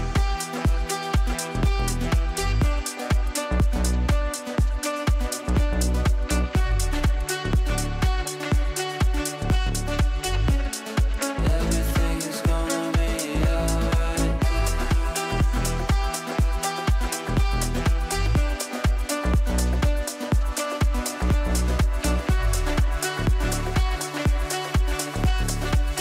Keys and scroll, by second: 6.9 Up, 14.2 shift+F2, 14.7 Escape.